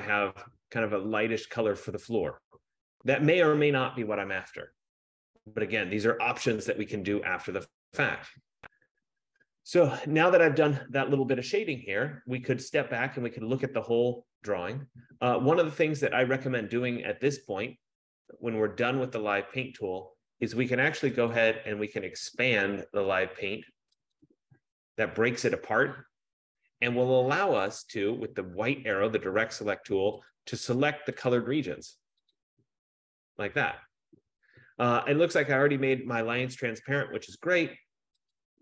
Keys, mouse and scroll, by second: 1.3 F15, 19.3 click, 21.6 click, 24.5 click, 27.8 click, 29.4 click, 30.4 click, 31.4 click, 32.6 click.